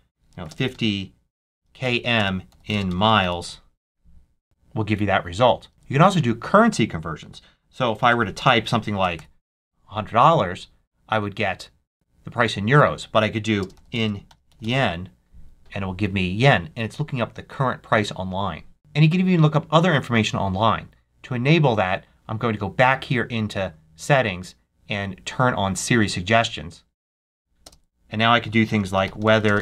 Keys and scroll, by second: 0.0-3.8 typing, 5.7 super+a, 8.0-9.4 typing, 13.4-15.0 typing, 28.4-29.6 typing.